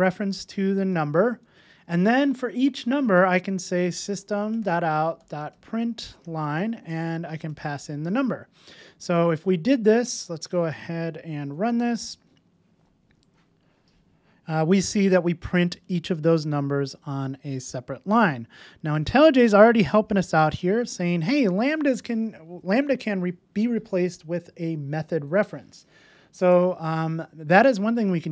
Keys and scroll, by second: 10.2 super+s, 11.3 ctrl+shift+r.